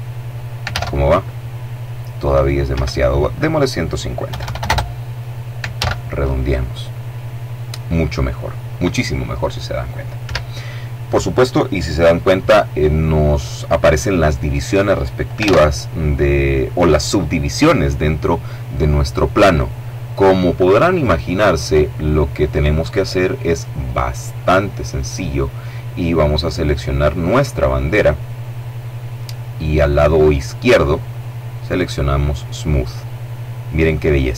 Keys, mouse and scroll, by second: 0.2 alt+a, 2.2 Escape, 2.8 click, 3.8 KP_1, 3.9 KP_5, 4.0 KP_0, 4.1 KP_Enter, 5.2 alt+a, 9.7 Escape, 15.0 alt+a, 25.9 right click, 32.4 click.